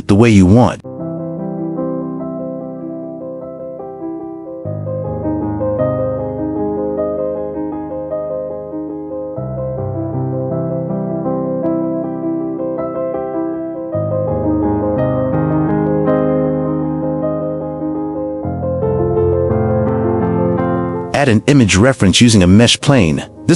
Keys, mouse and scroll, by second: 1.6 click, 2.3 q, 3.6 click, 4.6-5.2 drag, 5.7 click, 5.9 q, 6.6 g, 6.8 click, 6.9 g, 7.2 middle click, 10.6 n, 11.7 g, 12.0 middle click, 14.8 click, 15.4 g, 19.2 q, 20.6 shift+s, 22.3 shift+a.